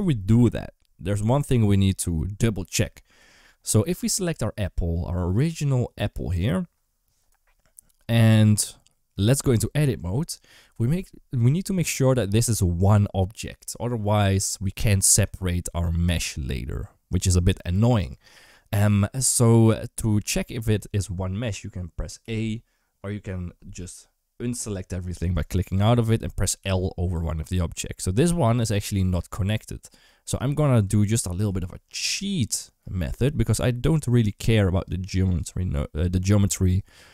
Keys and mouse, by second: 5.3 click, 9.4 Tab, 22.0 a, 24.5 click, 26.4 l, 31.3 alt+z, 34.2 1, 35.1 click.